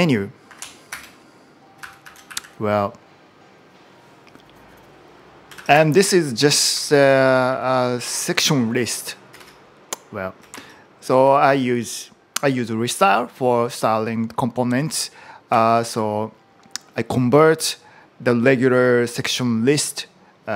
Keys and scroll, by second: 0.3 fn+Page_Down, 0.7 Return, 1.8 ctrl+d, 2.0 typing, 5.3-7.8 typing, 9.2 shift+8, 10.3-11.0 typing, 15.3-15.7 typing, 17.8-19.3 typing.